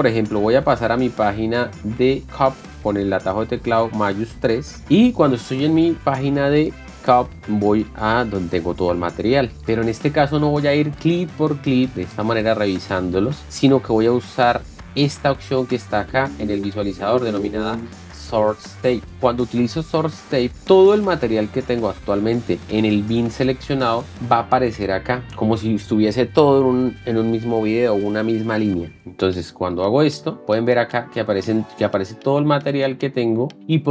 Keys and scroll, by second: 4.7 #.